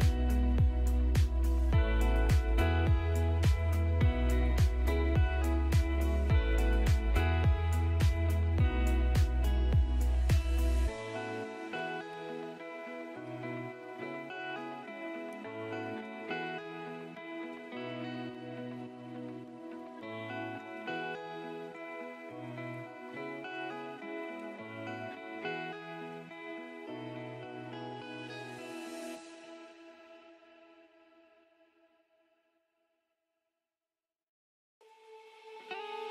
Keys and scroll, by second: 11.0 shift+F2, 11.4 Escape, 23.9 ctrl+r, 24.4 Escape, 24.7 F3, 25.1 Escape, 30.0 Escape, 34.1 shift+F2, 34.7 F3, 35.1 Escape.